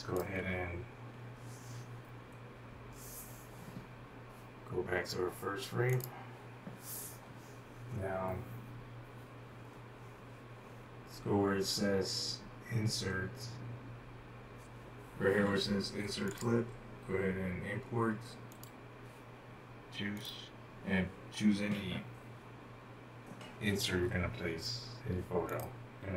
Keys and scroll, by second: 0.0-0.2 typing, 1.3 typing, 3.3 typing.